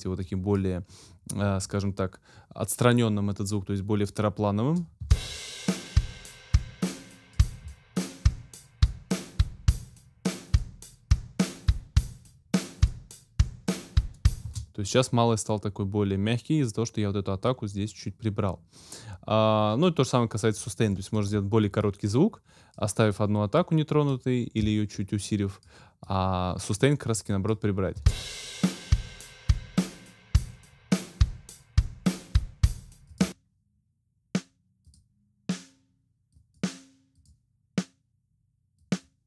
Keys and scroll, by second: 5.0 space, 14.4 space, 27.9 space.